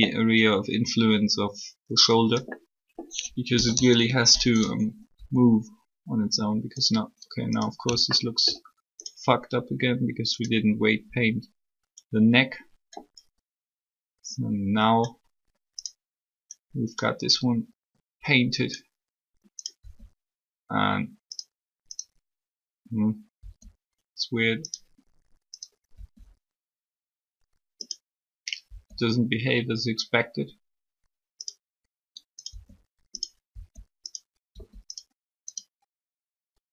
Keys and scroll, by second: 3.5 3, 19.8 r, 23.3 r, 25.9 r, 28.6 r, 32.3 r.